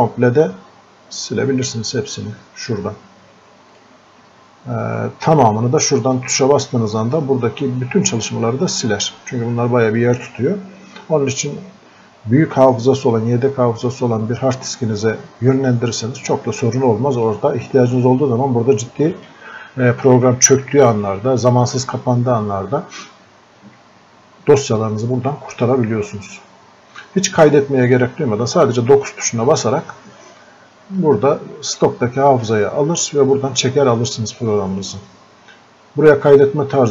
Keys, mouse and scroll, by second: 3.8 click, 16.1-31.0 drag, 31.0-34.8 drag.